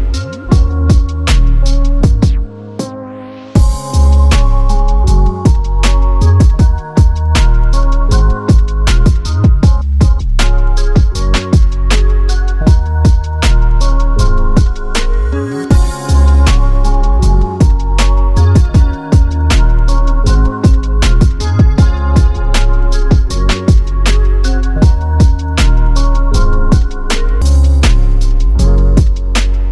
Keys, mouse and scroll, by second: 1.9 click, 3.1 click, 5.3 Down, 6.3 click, 8.5 Up, 9.6 click, 11.7-12.4 scroll down 1, 14.0 space, 14.2 click, 14.3 space, 15.3-16.5 scroll up 1, 17.3 click, 21.2 shift+click, 25.1 click.